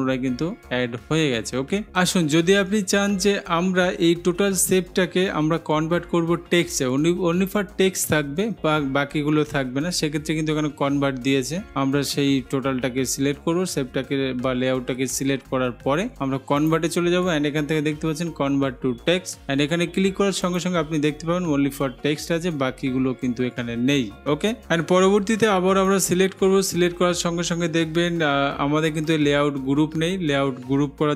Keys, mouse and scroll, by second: 16.9-17.9 drag, 20.7-21.7 drag, 26.2 click.